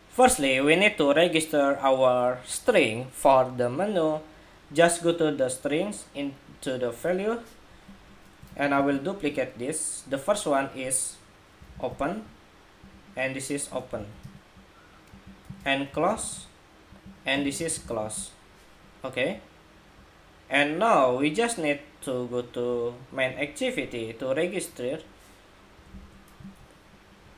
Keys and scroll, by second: 8.2 super+d, 8.9 super+d.